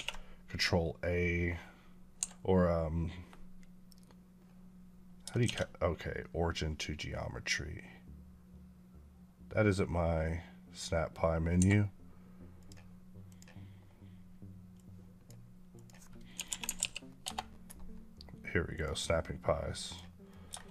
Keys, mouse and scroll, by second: 2.0 Escape, 5.3 shift+s, 11.4 Escape, 12.4 click, 16.2 typing, 17.5 right click, 20.1 middle click, 20.5 shift+s.